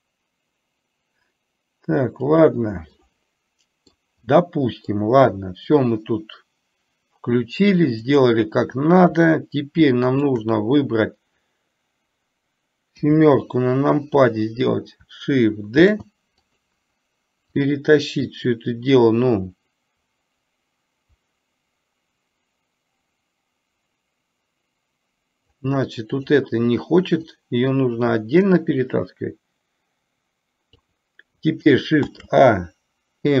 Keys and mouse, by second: 3.0-4.0 middle drag, 4.4-5.0 middle drag, 8.1 click, 10.3 shift+click, 16.0 shift+d, 17.6-25.8 drag, 26.3 click, 27.4-30.9 drag, 32.1 shift+a.